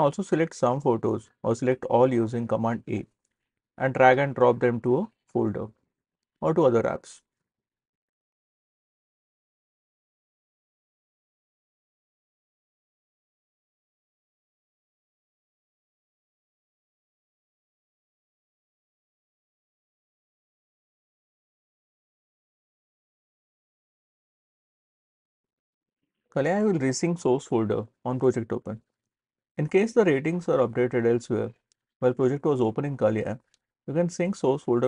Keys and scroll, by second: 3.1 super+a.